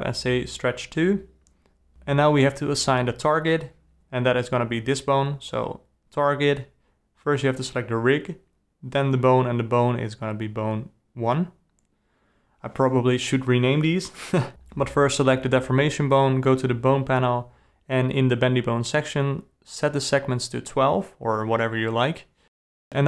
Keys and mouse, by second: 0.7 alt+a, 1.1 g, 2.5 click, 3.9 click, 6.3-7.9 drag, 8.7 click, 9.1 g, 10.5 click, 16.4 click, 17.6-19.2 drag, 20.2 g.